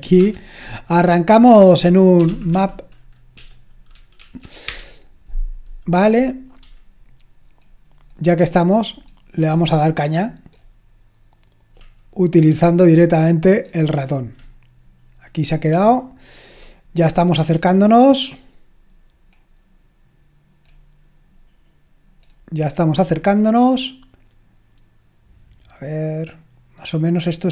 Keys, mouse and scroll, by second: 0.2 super+Return, 1.9-3.3 typing, 4.2 Right, 4.7 Return, 7.6-9.6 ctrl+scroll up 2, 9.6-11.8 scroll up 1, 12.7-13.6 scroll up 1, 13.6-14.4 scroll up 1, 14.4-15.7 scroll up 1, 15.9-16.6 scroll up 1, 16.6-17.4 scroll up 1, 17.5 scroll up 1, 20.8-22.2 scroll up 1, 22.2-22.8 scroll up 1, 22.8-26.7 scroll up 1, 26.7-27.2 scroll up 1, 27.2-27.5 scroll up 1.